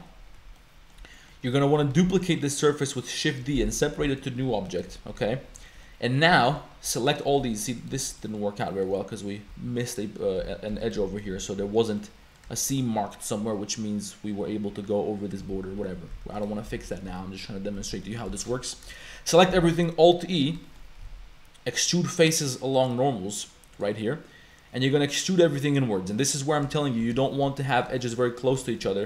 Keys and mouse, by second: 0.6 shift+click, 1.1 click, 2.1 shift+d, 4.0 p, 4.5 Tab, 4.9 Tab, 5.2 a, 5.7 shift+middle click, 6.3 shift+middle click, 7.1 middle click, 7.4 Tab, 7.8 middle click, 8.2 Tab, 8.2 click, 8.6 click, 9.5 Tab, 9.8 click, 10.4 z, 10.7 Tab, 11.0 z, 11.3 Tab, 11.6 Tab, 12.0 middle click, 12.6 shift+middle click, 15.8 Tab, 16.1 z, 16.3 click, 16.7 z, 17.1 Tab, 17.1 a, 17.9 a, 18.0 click, 18.4 click, 18.9 shift+click, 19.3 click, 19.6 alt+e, 20.6 shift+click, 21.1 alt+e, 26.8 shift+click, 27.2 shift+click, 28.0 shift+middle click, 28.6 shift+middle click.